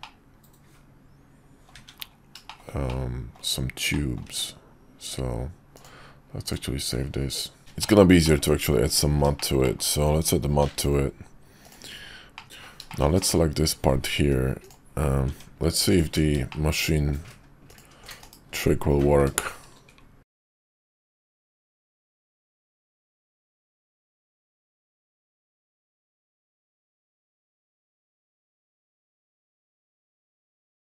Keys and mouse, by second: 0.0-1.7 middle drag, 2.5 shift+middle click, 2.9-3.4 middle drag, 3.9 middle drag, 4.3 `, 5.7-6.7 drag, 7.7 middle click, 8.1 middle click, 9.3 shift+middle click, 9.6 middle drag, 10.6 alt+m, 12.3 middle click, 12.4 w, 12.8 shift+middle click, 13.1 middle click, 15.2 Tab, 16.4 shift+middle click, 17.6 ctrl+click, 18.1 /, 19.3 shift+middle click, 20.8 ctrl+click, 21.2 middle click, 23.1 middle click, 24.3 shift+middle click, 24.7 middle click, 26.3 ctrl+click, 26.8 shift+click, 27.2 ctrl+z, 28.5 ctrl+click, 29.3 ctrl+z.